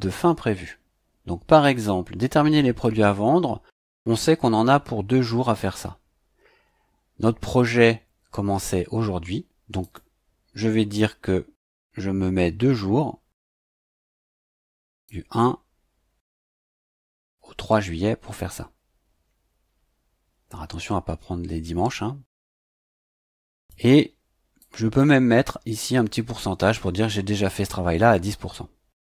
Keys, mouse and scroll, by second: 9.8 click, 11.6 click, 13.8 click, 15.0 click, 16.6 click, 17.2 click, 18.3 click, 22.3 click, 23.5 click, 24.6 click, 27.4 KP_1, 27.6 KP_0.